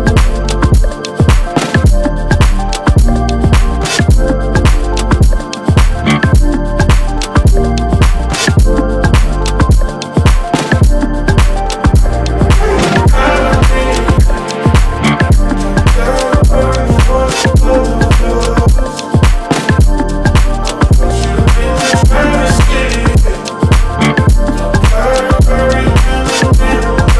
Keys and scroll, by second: 0.3 Right, 1.1 shift+Down, 1.6 Up, 2.4 Right, 3.8 Left, 9.7 b, 16.8 ctrl+z.